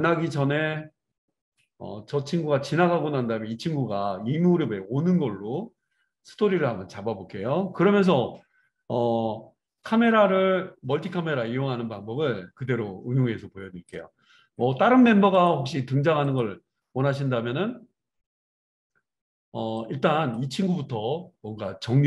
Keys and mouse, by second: 15.6-19.8 middle drag, 19.8-22.0 drag.